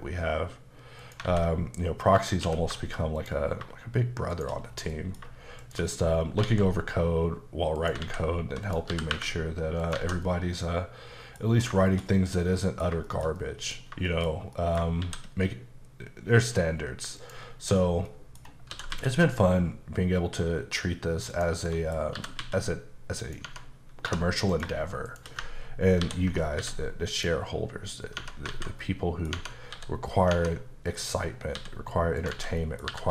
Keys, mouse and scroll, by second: 1.0 click, 2.2 click, 2.4 q, 3.2 click, 4.4 shift+click, 4.7 scroll down 2, 4.9 middle click, 5.7 click, 6.2 scroll down 2, 6.5 alt+x, 7.8 click, 8.7 click, 8.9 typing, 9.8 click, 10.3 middle click, 11.5 scroll down 2, 11.8 shift+middle click, 13.1 shift+middle click, 13.9 scroll up 1, 14.1 shift+middle click, 14.6 middle click, 15.0 shift+a, 17.2 click, 17.8 scroll down 1, 18.1 middle click, 18.7 typing, 21.3 click, 21.7 middle click, 22.0 scroll up 2, 22.2 typing, 23.2 click, 23.5 Tab, 24.1 2, 24.5 click, 25.1 shift+click, 26.6 x, 27.2 click, 28.2 Tab, 28.8 middle click, 29.8 s, 30.3 Tab, 31.6 s, 32.2 click, 32.4 alt+z, 32.6 middle click, 32.9 typing.